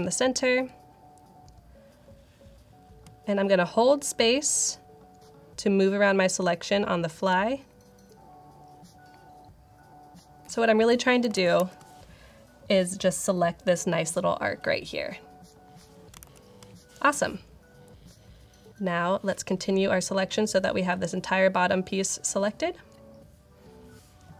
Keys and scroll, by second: 2.9 alt+space, 3.4 alt+space, 11.2 super+=, 11.6 super+=, 16.2 super+-.